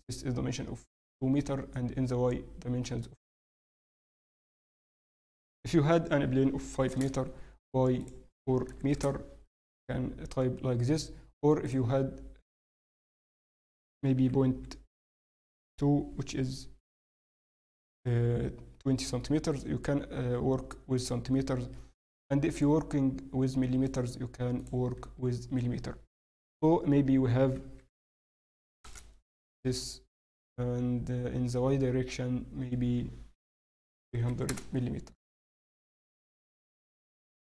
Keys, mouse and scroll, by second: 1.1-1.7 scroll up 1, 3.0 shift+middle click, 4.6 click, 8.0 click, 11.6 click, 19.5 click, 30.1 click, 34.1 0, 36.0 click.